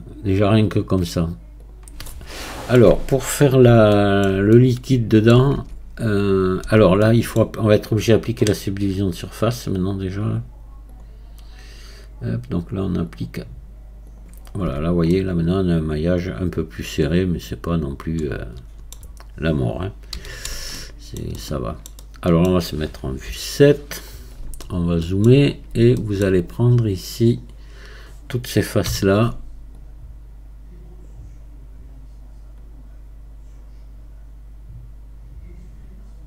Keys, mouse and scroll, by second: 2.1-3.5 middle drag, 3.5 scroll up 2, 4.0-5.6 shift+middle drag, 5.6 Tab, 6.1 scroll up 1, 6.7 Tab, 7.1 middle click, 7.4-9.1 scroll down 3, 9.1-9.9 scroll down 2, 9.9-10.5 scroll down 1, 10.5-10.9 scroll down 1, 10.9-15.1 drag, 15.1-18.2 middle drag, 19.5-20.2 scroll up 1, 20.2 a, 20.8 middle click, 21.4 middle click, 22.0-23.3 middle drag, 23.3 KP_7, 24.1-24.7 scroll up 1, 24.7 shift+middle click, 25.5-26.0 scroll up 2, 26.0-27.3 shift+middle drag, 27.3-28.9 drag, 28.9 c.